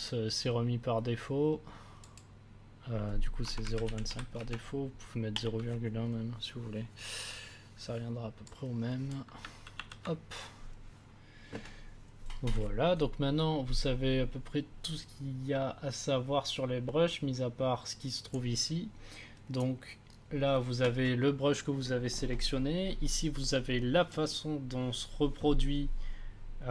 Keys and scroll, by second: 3.2-4.5 typing, 9.7 ctrl+z.